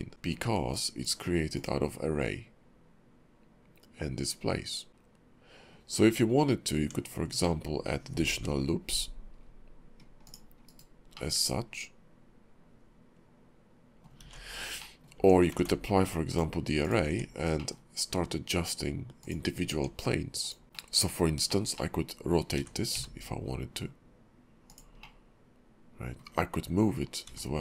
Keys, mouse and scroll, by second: 0.1 Tab, 0.1 ctrl+`, 4.9 Tab, 4.9 shift+middle click, 6.8 Tab, 7.4 middle click, 8.3 ctrl+r, 11.2 middle click, 14.2 ctrl+z, 14.8 middle click, 15.2 Tab, 15.6 ctrl+`, 17.1 Tab, 17.5 middle click, 19.2 click, 19.7 Tab, 20.4 click, 20.7 middle click, 21.5 shift+middle click, 21.7 middle click, 22.6 r, 25.0 middle click, 27.2 g.